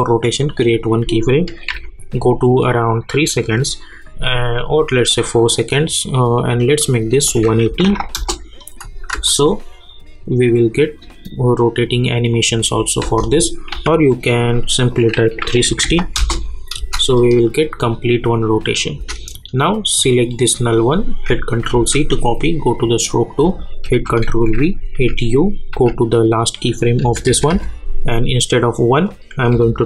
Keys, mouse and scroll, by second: 0.4 click, 1.7 -, 3.4 click, 8.1 Return, 8.6 click, 9.1 space, 13.0 space, 13.7 k, 14.9 click, 16.1 Return, 16.4 click, 16.8 space, 18.9 space, 20.0 click, 21.7 ctrl+c, 22.6 click, 23.8 ctrl+v, 24.9-27.0 typing, 29.1 click, 29.5 -.